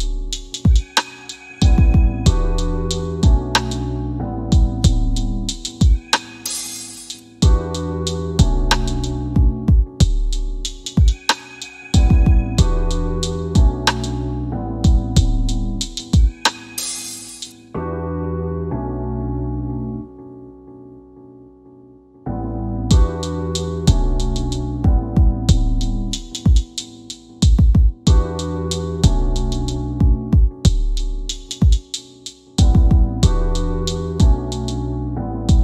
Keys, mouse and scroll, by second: 2.5 right click, 3.1 w, 3.6 click, 6.4 alt+w, 10.3 c, 11.0 middle click, 13.0 scroll down 1, 15.2 click, 16.0 click, 24.7 click.